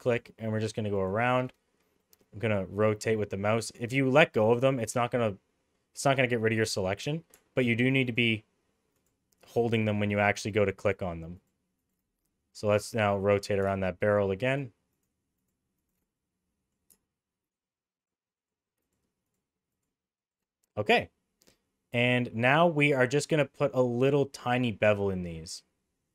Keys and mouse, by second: 0.9 alt+shift+click, 2.1-3.7 middle drag, 10.1 alt+shift+click, 10.9 alt+shift+click, 11.8 alt+shift+click, 12.2-13.4 middle drag, 14.0 alt+shift+click, 15.4 alt+shift+click, 15.8 alt+shift+click, 16.1 middle click, 18.4 alt+shift+click, 18.8 alt+shift+click, 19.7 alt+shift+click, 20.2 alt+shift+click, 21.0 middle click.